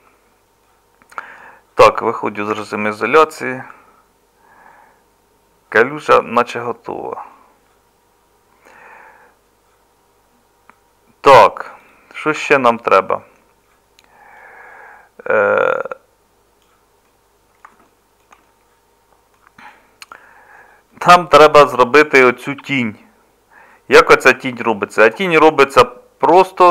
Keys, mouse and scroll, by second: 1.8 KP_Divide, 2.5 Tab, 8.7-12.4 middle drag, 12.4 Tab.